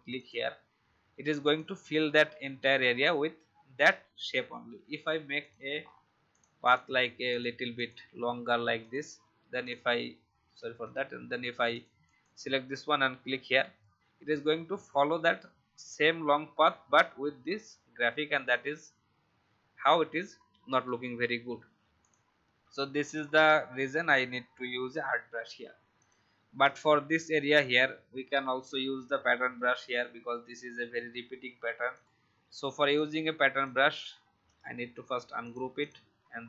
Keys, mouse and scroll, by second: 5.7 scroll up 1, 6.3 click, 9.2 Escape, 9.6 click, 10.6 ctrl+z, 11.2 ctrl+v, 11.7 click, 21.4 Delete, 22.0 click, 22.9-24.5 scroll down 1, 25.9 click, 29.6 alt+scroll up 1, 31.9 click, 34.4 right click, 35.4 click.